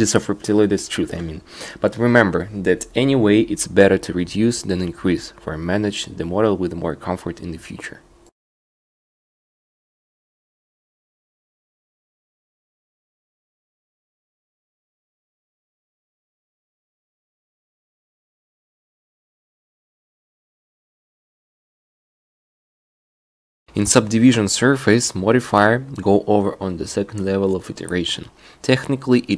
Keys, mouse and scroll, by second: 1.5 middle click, 3.1 a, 3.3 a, 3.9-5.0 middle drag, 4.7 ctrl+r, 6.0 click, 8.2 click, 10.2-11.2 drag, 11.0 a, 11.2 c, 11.5-13.2 drag, 17.1 shift+e, 17.8 shift+e, 18.7 click, 21.6-25.1 drag, 26.2 right click.